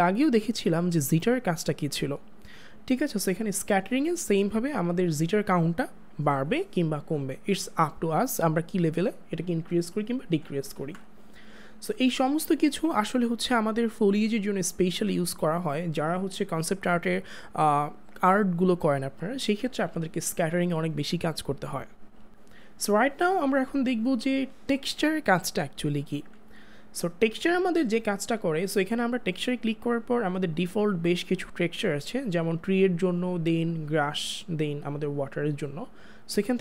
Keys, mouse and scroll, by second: 0.4 click, 3.4 click, 10.6 click, 30.5 click.